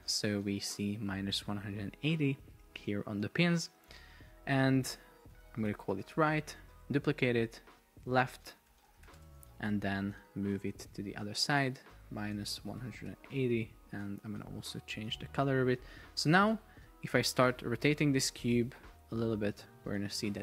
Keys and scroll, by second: 5.5 super+r, 6.4 Return, 7.0 super+d, 7.8 super+r, 8.0 shift+,, 8.4 BackSpace, 8.7 shift+l, 9.2 Return, 13.0 Return, 18.5 shift+Up, 19.2 shift+Down.